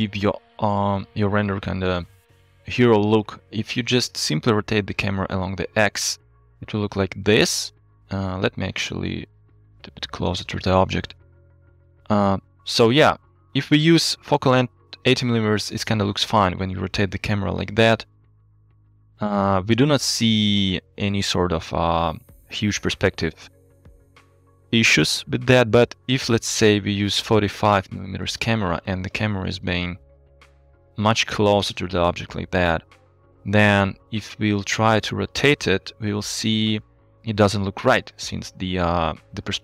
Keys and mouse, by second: 0.9 KP_0, 2.2 middle drag, 3.1 middle drag, 4.3 middle click, 4.3 click, 5.3 r, 5.5 x, 8.0 middle click, 8.3 click, 9.2 g, 9.4 y, 11.1 KP_0, 13.5 click, 17.2 KP_3, 18.4 r, 26.3-27.9 drag, 29.6 g, 29.8 y, 34.1 r, 36.5 z.